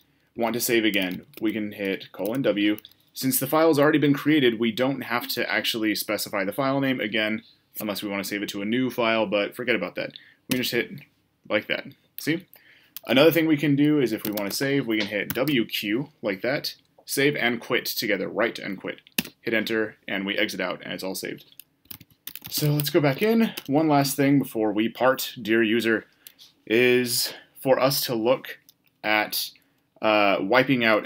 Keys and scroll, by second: 10.5 Return, 15.4 typing.